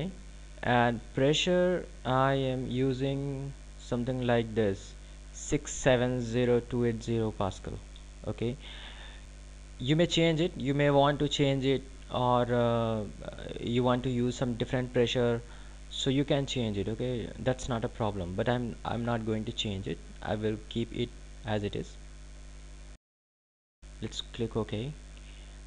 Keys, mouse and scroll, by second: 3.1 click, 24.0 click.